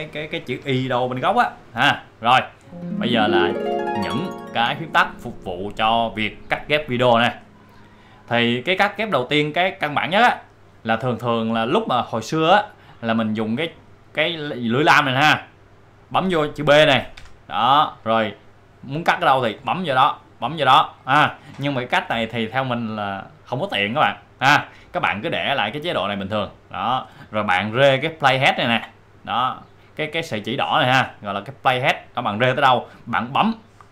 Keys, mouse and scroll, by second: 8.1-14.4 drag, 17.2 b, 19.6 click, 26.4 click, 28.6-33.9 drag.